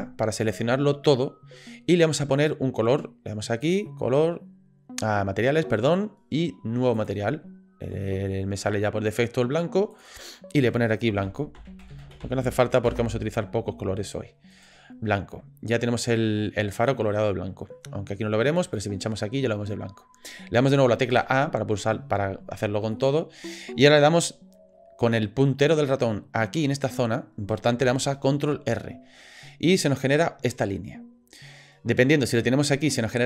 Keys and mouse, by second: 9.9 click, 10.2-13.7 drag, 14.5 click, 18.7-21.1 drag, 21.1 a, 22.9 shift+click, 28.5 ctrl+r.